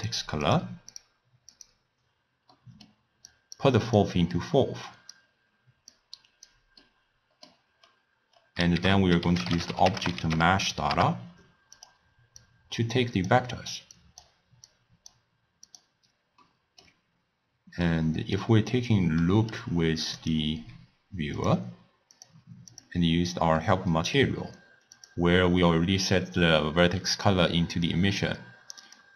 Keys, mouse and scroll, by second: 0.0 click, 0.5 drag, 0.9 click, 1.5 click, 2.6-3.3 middle drag, 3.3 click, 4.0-6.0 drag, 6.9 middle click, 7.8 scroll down 1, 7.8 scroll up 1, 8.0-8.8 scroll down 4, 8.8 ctrl+a, 12.5 click, 14.0 click, 14.7 click, 15.7 click, 16.5-20.2 middle drag, 20.2 click, 21.4 click, 22.2-23.7 drag, 23.7-25.0 middle drag, 25.0 click.